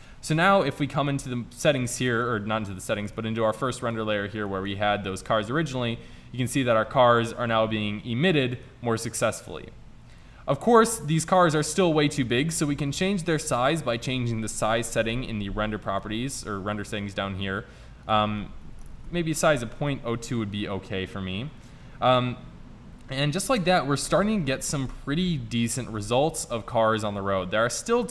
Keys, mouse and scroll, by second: 0.9 click, 8.9 click, 9.6 middle click, 10.2 middle click, 10.3-10.8 right drag, 10.8-12.2 drag, 14.1 click, 20.0 middle drag, 20.3 middle click, 20.6 middle drag, 20.8-21.2 drag, 21.2-22.1 middle drag, 25.0 click, 25.4 click.